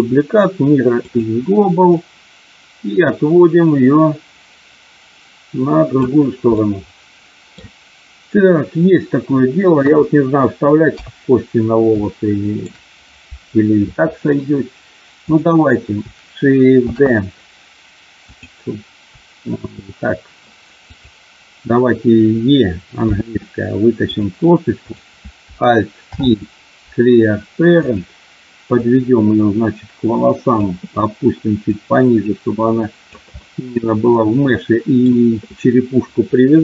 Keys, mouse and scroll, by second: 1.9-6.0 drag, 6.5-7.5 middle drag, 9.7 KP_1, 10.8 KP_3, 11.9 shift+middle click, 16.8 shift+d, 18.2 click, 23.1 e, 24.1 click, 26.0 alt+p, 28.8-30.6 drag, 31.6-33.1 drag, 33.3-35.0 middle drag.